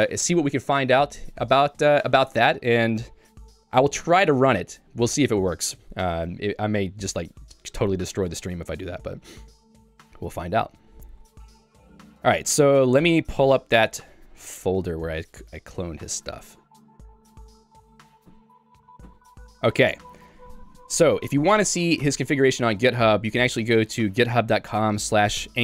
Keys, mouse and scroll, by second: 6.2 Escape, 6.9 j, 8.8 k, 13.8 super+e, 14.4 h, 15.9-18.4 typing.